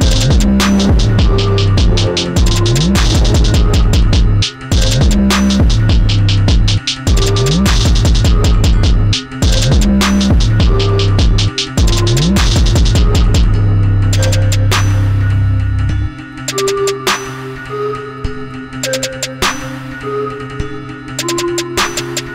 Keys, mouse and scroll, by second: 8.0 click, 9.5 click, 10.6-12.3 drag, 12.3-14.4 right drag, 14.4-17.4 drag, 17.4 KP_0, 20.1-22.3 drag.